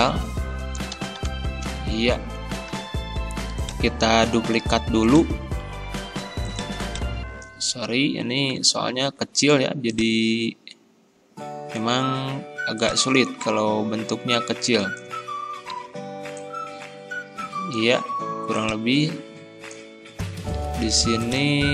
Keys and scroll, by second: 1.0 Delete, 1.3 2.